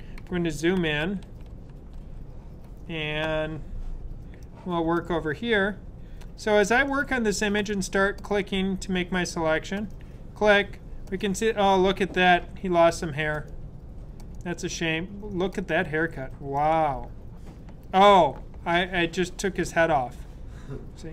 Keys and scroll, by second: 0.7 super+=, 1.0 super+=, 1.2-1.9 typing.